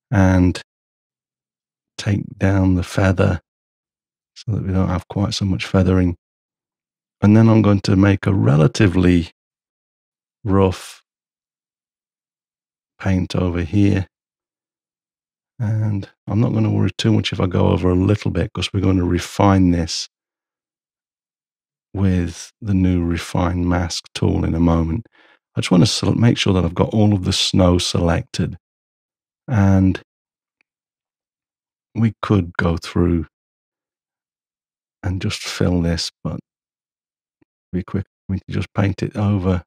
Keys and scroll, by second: 2.5 shift+], 9.4 m.